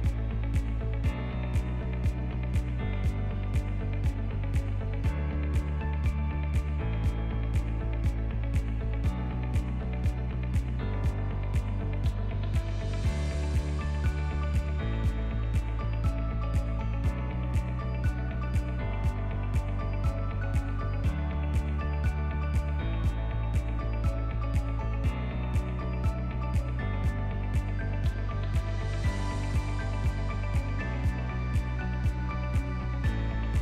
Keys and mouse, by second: 0.2 click, 1.1-2.4 drag, 3.1 click, 4.7 shift+click, 5.2 ctrl+middle click, 5.2 ctrl+click, 6.0 KP_1, 6.8 shift+click, 7.4 alt+click, 10.1 ctrl+b, 14.1 shift+click, 14.6 shift+click, 16.1 click, 16.9 Tab, 17.3 ctrl+middle drag, 18.1 shift+middle drag, 18.6-19.6 right drag, 19.5 click, 20.0 shift+middle click, 20.6-21.4 ctrl+middle drag, 21.7 shift+middle click, 23.4 shift+middle click, 23.9 click, 24.1 middle click, 25.5 Tab, 27.0 Tab, 27.8 Tab, 28.6 alt+click, 29.7 shift+d, 30.7 p, 31.6 Tab, 31.9 click, 32.4 Tab, 32.9 Tab, 33.2 click.